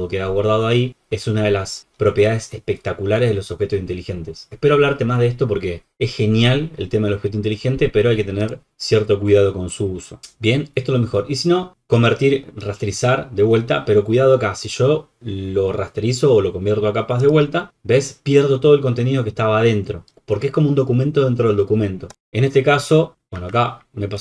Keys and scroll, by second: 23.1 super+-, 23.3 ctrl+z.